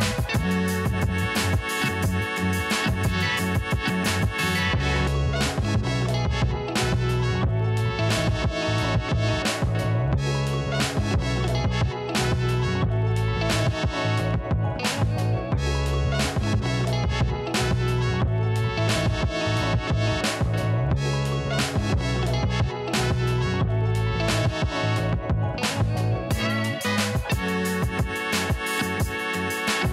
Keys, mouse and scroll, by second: 1.2-2.6 scroll up 1, 2.6-4.4 drag, 4.4-5.8 scroll up 1, 5.8 click, 6.5-7.7 scroll down 1, 7.7 click, 10.5 alt+scroll down 1, 10.8 click, 11.2 ctrl+l, 12.2 click, 14.8 click, 16.5-16.8 alt+scroll down 1, 17.1 scroll up 1, 17.3-17.9 scroll down 2, 17.9 alt+scroll up 1, 18.4 right click, 18.6 click, 19.0 Left, 19.2 click, 19.6 click, 20.2 alt+scroll down 1, 20.9 click, 25.2 alt+scroll down 1, 26.9 alt+scroll down 1, 27.9 click.